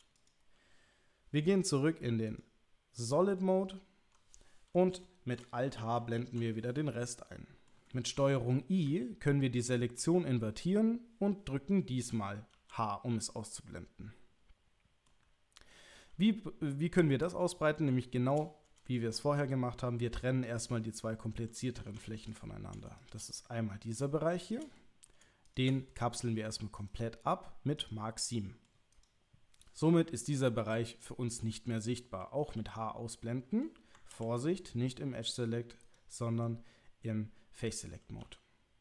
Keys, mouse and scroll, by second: 0.1 click, 2.3 click, 3.4-4.7 middle drag, 5.0 shift+middle click, 6.1 alt+h, 6.9 middle click, 9.4 ctrl+i, 12.5 h, 13.3-15.0 middle drag, 15.7 middle click, 16.7-17.8 middle drag, 18.0 shift+middle click, 18.9 ctrl+middle click, 20.4 click, 21.9 2, 22.3 click, 23.0 shift+click, 23.3 middle click, 24.7 middle click, 25.4 shift+click, 25.9 middle click, 26.7-27.9 right drag, 28.2 middle click, 30.9 click, 32.4 h, 34.1 ctrl+z, 35.8 click, 38.2 h.